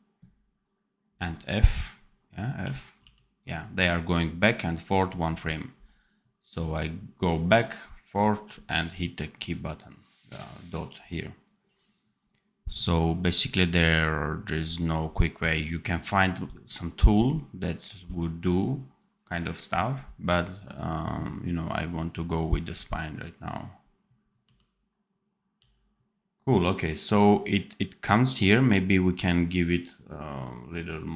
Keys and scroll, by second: 2.5 r, 2.9 t, 24.3 d.